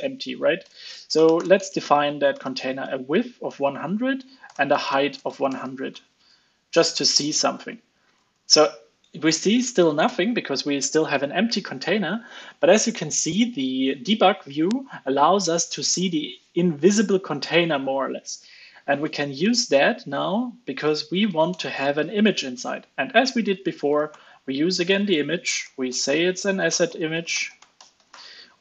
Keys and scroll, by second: 6.2 super+s, 7.1 alt+super+l, 7.4 super+s, 8.0 super+Right, 19.7 alt+super+l, 19.9 super+s, 21.2 super+Right, 21.8 ctrl+space.